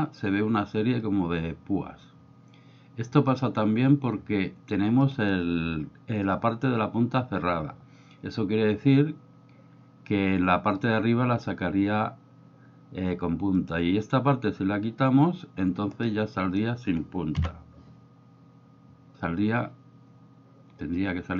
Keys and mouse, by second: 13.6 click, 16.1 middle click.